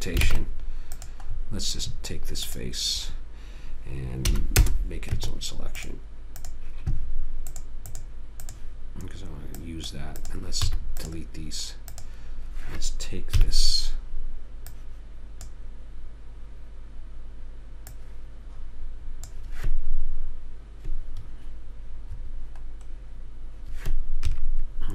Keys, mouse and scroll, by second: 0.6 ctrl+Tab, 1.7 middle click, 2.8 click, 4.6 p, 5.5 Tab, 6.7-9.8 drag, 11.0 x, 13.7 KP_3, 15.0 click, 18.2 click, 24.6 KP_3.